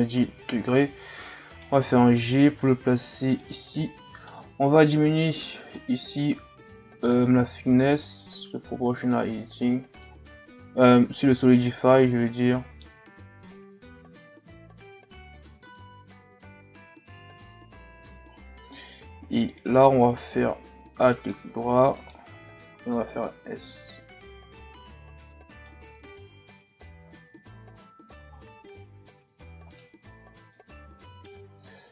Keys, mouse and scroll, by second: 1.6 g, 3.8-4.9 ctrl+scroll up 2, 5.4-10.0 drag, 11.3 z, 11.7-12.9 middle drag, 12.9 s, 13.6 s, 14.3 click, 15.1-17.5 typing, 16.2 click, 17.7 ctrl+scroll up 9, 18.0-18.6 shift+scroll down 8, 18.7-19.6 shift+scroll up 3, 19.9 x, 21.1 alt+right click, 22.0 alt+right click, 22.7 s, 25.9 Tab, 26.3 a, 26.6-27.6 scroll down 7, 27.6 scroll down 2, 27.6-28.9 scroll up 10, 28.9 Tab, 29.7 alt+right click, 30.5-31.9 drag.